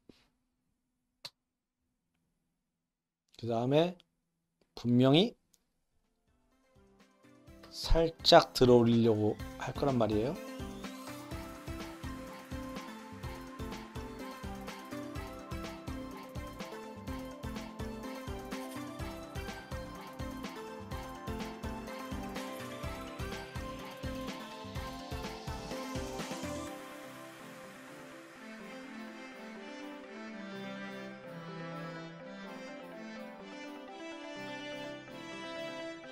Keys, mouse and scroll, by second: 1.2 i, 2.4 click, 3.2 click, 7.6 r, 11.0 i, 11.2 click, 11.4 r, 11.8 i, 12.0 click, 12.4 click, 12.7 ctrl+c, 12.7 ctrl+v, 12.8 click, 13.0 click, 13.4 r, 13.9 shift+middle click, 14.1 click, 14.3 ctrl+c, 14.3 ctrl+v, 14.4 click, 14.8 click, 15.1 ctrl+z, 15.3 ctrl+c, 15.3 click, 15.4 ctrl+v, 15.4 drag, 15.5 drag, 15.7 click, 16.2 r, 16.7-17.5 drag, 17.7-20.1 typing, 18.2 click, 18.6 click, 18.7 click, 19.2 click, 19.3 click, 19.4 click, 19.6 click, 20.0 click, 20.6 click, 20.7-21.2 drag, 21.3-30.6 typing, 21.5 click, 22.4-22.8 drag, 23.4 click, 24.0 click, 24.9 click, 25.0 ctrl+c, 25.1-25.4 drag, 25.4 ctrl+v, 25.5 click, 25.9 click, 25.9 click, 26.4 click, 26.5 click, 26.7 click, 27.7 click, 27.8 click, 28.0 click, 28.1 drag, 28.4 click, 28.5 click, 28.6 drag, 29.0 click, 29.1 click, 29.6 click, 29.7 ctrl+c, 29.8 click, 29.8 ctrl+v, 30.3 click, 30.9-31.4 drag, 31.6 click, 31.7 ctrl+z, 31.8 click, 32.4 i, 32.5 click, 32.5 click, 32.5 space, 32.9 space, 33.1 click, 33.7 i, 33.8 click, 33.9 click, 34.0 drag, 34.2 click, 34.3-34.6 drag, 34.7 ctrl+c, 34.8 click, 34.8 ctrl+v, 34.9 click, 34.9 space, 35.5 click, 35.9 click, 36.0 middle click.